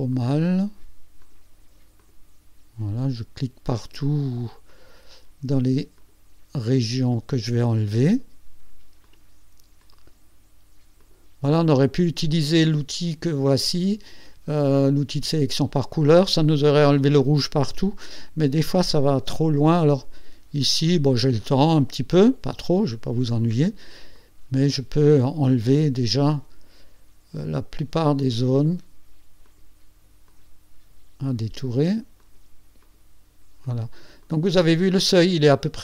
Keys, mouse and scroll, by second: 0.1 shift+click, 1.2 shift+click, 2.0 shift+click, 4.0 shift+click, 4.7 shift+click, 6.0 shift+click, 7.1 shift+click, 9.0 shift+click, 9.8 shift+click, 11.0 shift+click, 18.9 shift+click, 19.9 shift+click, 20.6 shift+click, 21.5 shift+click, 22.1 shift+click, 23.3 shift+click, 24.1 shift+click, 26.3 shift+click, 28.3 shift+click, 29.4 shift+click, 30.3 shift+click, 32.2 shift+click, 32.8 shift+click, 33.6 shift+click, 34.2 shift+click.